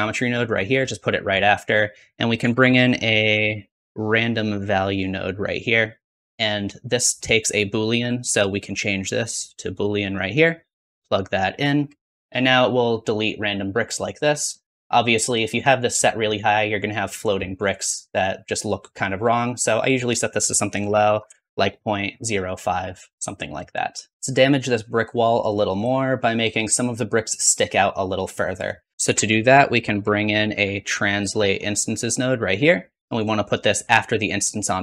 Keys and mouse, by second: 2.3 shift+a, 6.6 click, 6.6 middle click, 6.6 right click, 8.0 click, 12.2 ctrl+z, 28.9 BackSpace, 28.9 shift+a, 33.1-34.5 drag.